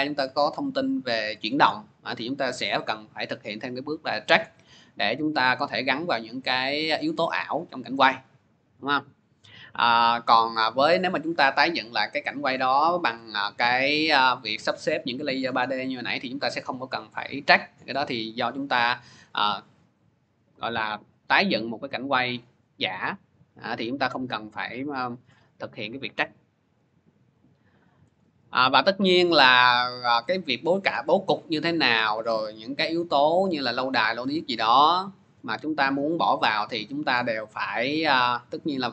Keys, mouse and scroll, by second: 4.2 click, 10.7-15.8 drag, 25.1 click, 28.0 click, 30.7 click, 32.8 scroll, 32.8 middle click, 33.6 middle click, 36.9 click.